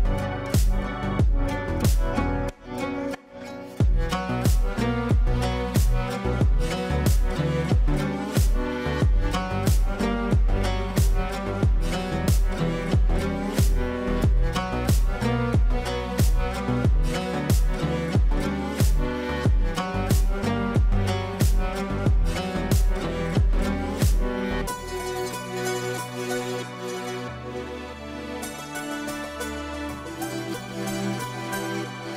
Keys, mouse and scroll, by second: 3.5 scroll down 1, 4.6 space, 6.2 right click, 8.8-14.6 drag, 15.8 F2, 16.3-16.9 drag, 20.9-21.7 ctrl+click, 21.4 ctrl+right click, 22.0 ctrl+space, 22.8 ctrl+a, 23.5-26.2 typing, 27.0 ctrl+space, 28.5-29.5 drag, 32.0 scroll down 1.